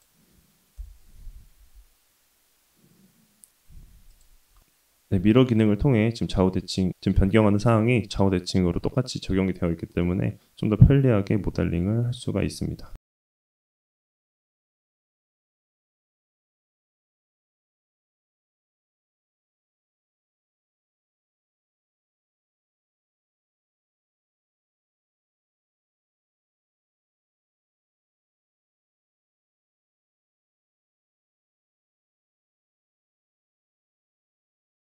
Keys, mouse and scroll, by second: 0.8 KP_7, 1.6 g, 4.6 middle click, 5.4 click, 5.8 middle click, 6.6 KP_7, 7.8 g, 11.0-12.6 middle drag, 12.7 Tab, 12.9-14.5 shift+middle drag, 12.9-13.6 scroll down 1, 14.7-15.3 scroll down 1, 15.3-15.7 scroll up 1, 15.7 middle drag, 16.1 Tab, 16.6 middle click, 17.6 1, 17.9 click, 18.3 middle click, 18.9 g, 20.6 click, 21.3 g, 25.5 KP_3, 26.4 g, 29.6 Tab, 30.1 z, 30.1 s, 31.2-31.7 shift+middle drag, 31.8 middle drag, 32.5 Tab, 33.7 KP_3, 34.2 g.